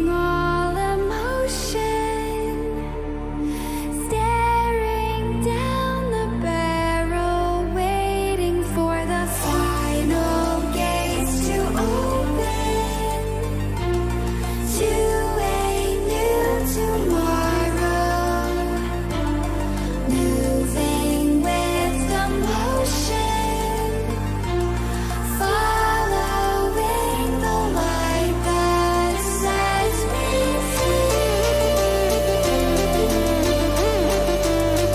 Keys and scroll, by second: 11.1 ctrl+=, 12.1 ctrl+[, 17.0 ctrl+=, 17.6 ctrl+=, 19.4 [, 23.5 ctrl+-, 27.6 ctrl+-, 33.1 ctrl+g, 34.7-34.9 typing.